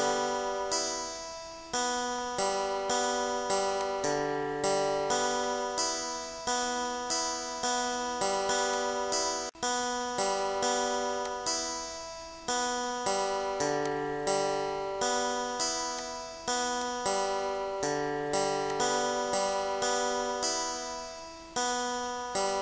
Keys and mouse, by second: 0.0 click, 1.1 click, 1.7 click, 8.1 click, 8.7 click, 12.1 click, 12.6 click, 13.4 click, 16.4 ctrl+x, 17.3 click, 18.4 Delete, 19.9 click, 21.9 click.